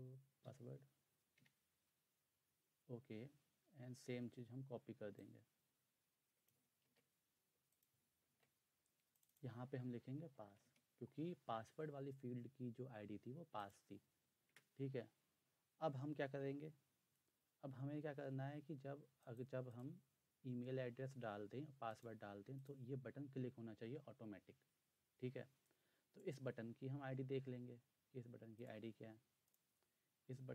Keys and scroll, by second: 0.2-1.4 typing, 6.8 ctrl+c, 8.3 ctrl+v, 9.9-11.1 typing, 14.5 Return.